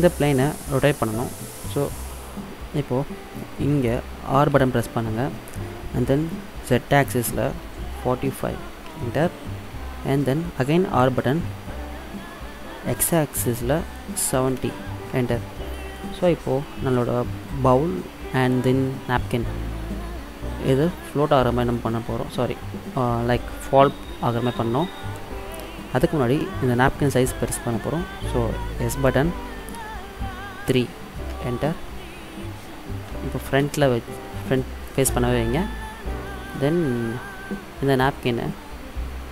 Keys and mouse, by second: 4.6 r, 10.9 r, 16.2 middle drag, 16.3 click, 16.4 middle click, 28.9 s, 32.1 middle click, 33.7 KP_1, 36.6-38.4 drag.